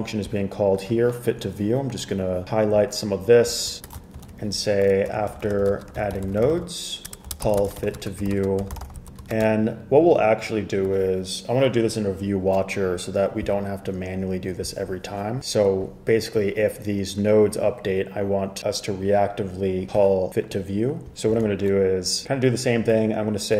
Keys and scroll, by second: 4.3 super+k, 5.0-9.6 typing, 21.5 super+a.